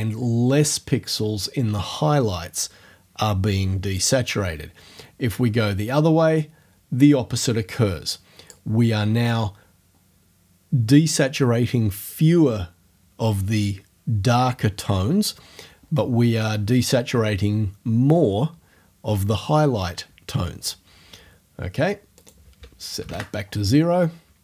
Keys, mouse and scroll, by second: 5.4-8.7 drag, 22.2 click, 23.0 0, 23.7 Return.